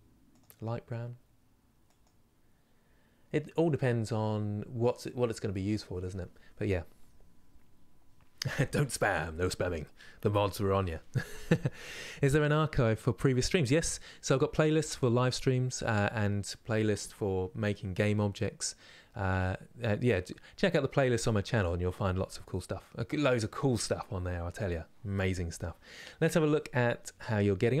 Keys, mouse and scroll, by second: 3.3-27.8 middle drag.